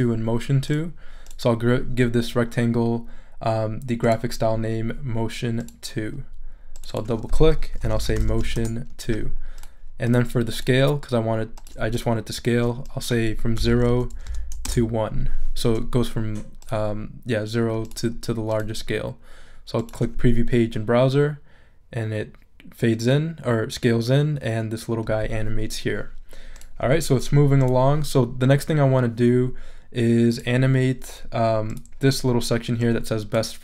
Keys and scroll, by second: 7.4-8.9 typing, 13.6 0, 13.8 Tab, 14.2 0, 14.6 Return.